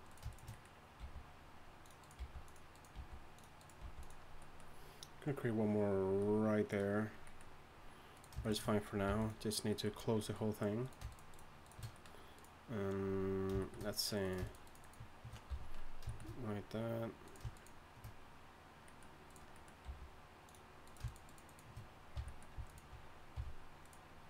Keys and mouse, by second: 1.0 g, 2.2 g, 2.9 g, 3.8 g, 7.0-8.1 drag, 8.1-10.4 right drag, 9.1 g, 10.8-12.3 right drag, 15.5 f, 18.8 shift+right click, 19.8 g, 22.1 f, 23.3 f.